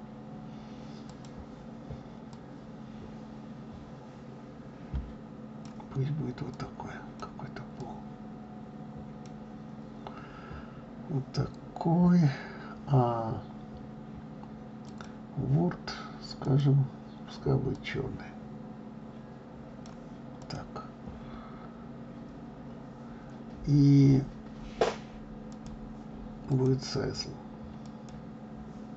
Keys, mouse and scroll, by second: 2.5 click, 14.9 click, 17.9 click, 20.4 click, 22.1-22.5 scroll down 3, 22.7 scroll up 3, 25.4 click, 28.0-28.9 drag.